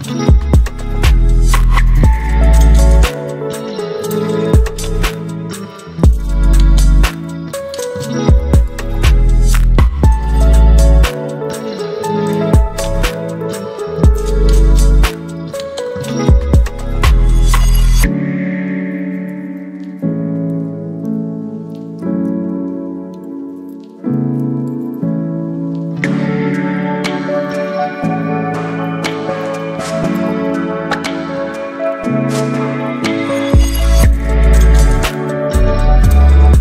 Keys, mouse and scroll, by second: 0.5 Return, 3.8 click, 7.7 right click, 8.4 click, 10.5-12.4 typing, 12.7 ctrl+a, 14.2-24.0 drag, 24.0-25.5 alt+drag, 26.6-29.0 typing, 29.8 ctrl+a, 31.7-36.6 drag.